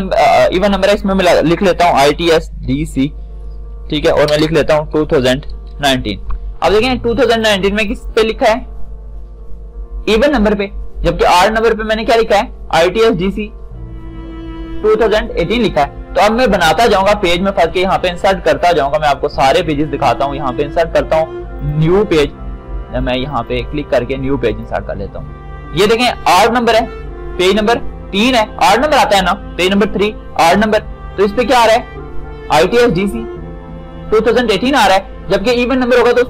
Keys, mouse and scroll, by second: 2.3 shift+t, 7.5 click, 11.7 click, 21.9 click, 30.1-33.1 drag.